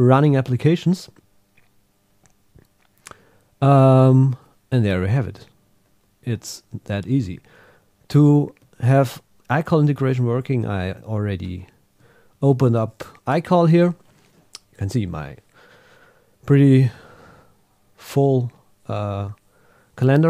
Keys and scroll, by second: 5.4 Up, 7.6 super+Tab, 8.7 super+Right.